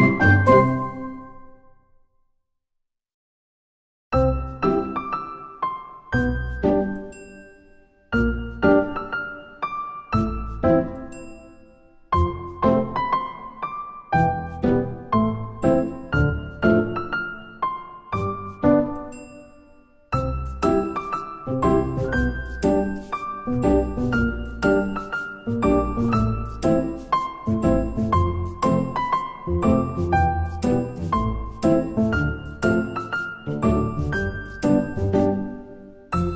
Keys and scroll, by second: 5.7 ctrl+z, 10.3 8, 16.4 Tab, 17.2 Tab, 17.5-18.4 typing, 19.7 ctrl+z, 30.1 Delete, 30.7 Delete, 31.3 Delete, 32.0 Delete, 33.1 Delete, 34.4 Delete, 34.4 ctrl+z, 34.9 Delete, 35.6 Delete.